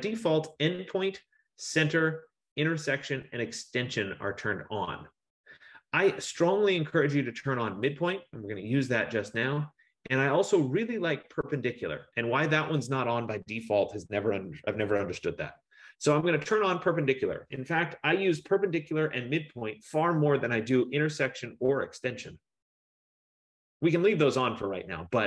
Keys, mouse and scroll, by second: 7.9-13.0 drag, 16.6-18.0 drag, 18.3 click.